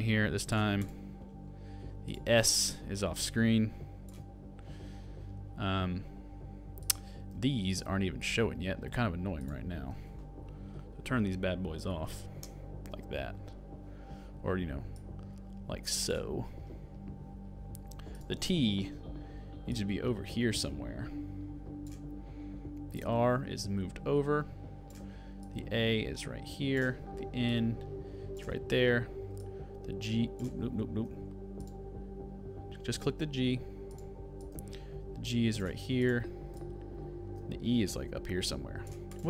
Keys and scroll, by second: 12.5 alt+[, 30.6 shift+super+z, 31.5 super+z.